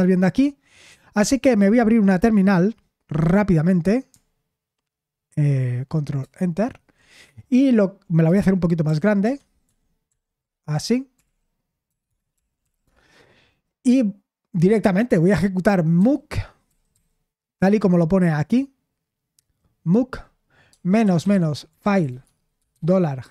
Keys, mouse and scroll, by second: 6.2 super+Return, 8.9 ctrl+*, 9.3 ctrl+*, 9.7 ctrl+*, 10.1 ctrl+*, 10.9-12.6 typing, 12.9 Return, 16.0-17.4 typing, 18.3-18.7 scroll up 2, 20.7-23.3 typing.